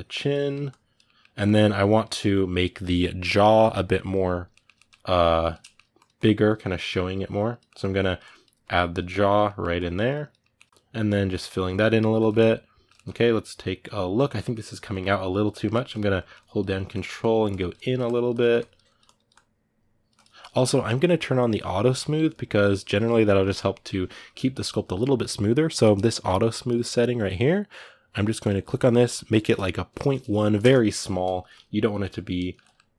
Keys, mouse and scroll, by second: 0.2 middle click, 0.4 click, 0.8 middle click, 1.2-4.3 drag, 4.3 ctrl+middle click, 4.9 click, 5.4 shift+middle click, 5.7-7.4 drag, 7.4 middle click, 7.7-9.2 drag, 9.2 middle click, 9.5 click, 10.2 ctrl+middle click, 10.7 click, 11.1 middle click, 11.5 click, 11.9-15.9 ctrl+middle drag, 15.9-32.1 ctrl+drag, 32.1 ctrl+middle click, 32.8-32.9 drag.